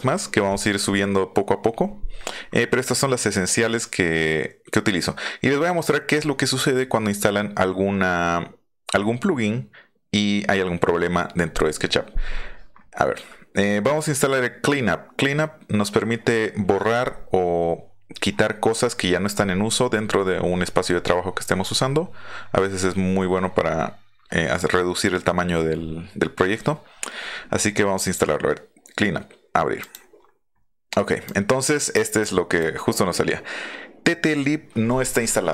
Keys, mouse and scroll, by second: 29.8 click, 31.2 click, 32.2-32.6 drag.